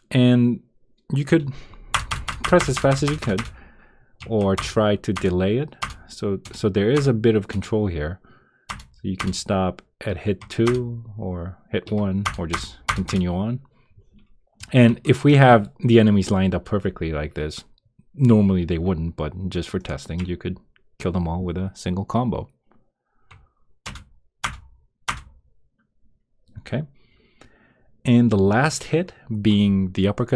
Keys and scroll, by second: 1.9 Return, 2.4 Return, 3.0 Return, 4.5 Return, 5.1 Return, 5.8 Return, 6.4 Return, 6.9 Return, 7.5 Return, 8.6 Return, 9.2 Return, 10.6 Return, 12.2 Return, 12.8 Return, 23.8 Return.